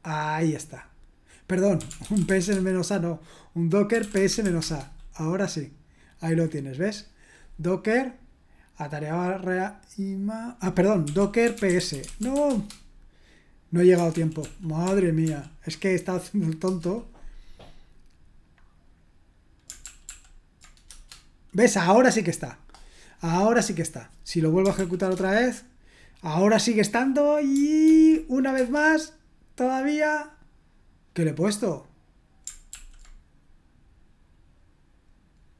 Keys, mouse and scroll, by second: 1.5-4.9 typing, 10.8-12.8 typing, 14.1 ctrl+p, 14.4 ctrl+p, 14.8 ctrl+p, 15.2 ctrl+p, 16.6 Return, 19.8 ctrl+p, 20.0 ctrl+p, 20.9 Return, 24.7 ctrl+p, 25.1 Return, 27.8 ctrl+p, 28.5 Return, 32.7 ctrl+p.